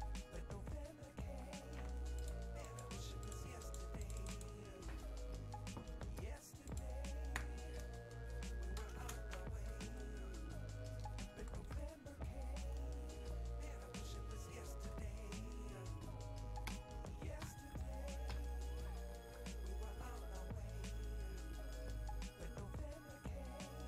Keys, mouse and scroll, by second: 0.9 click, 2.3 click, 9.1 BackSpace.